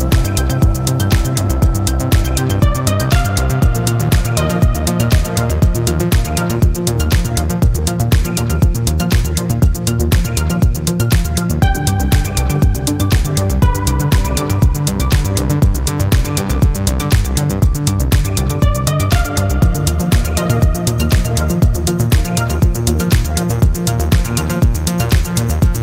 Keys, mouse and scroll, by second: 1.1 click, 2.6 click, 4.8 click, 5.7-6.0 scroll down 2, 6.7 scroll up 2, 8.2-9.6 drag, 10.5 click, 13.1 click, 15.9 click, 17.1 click, 23.2 click.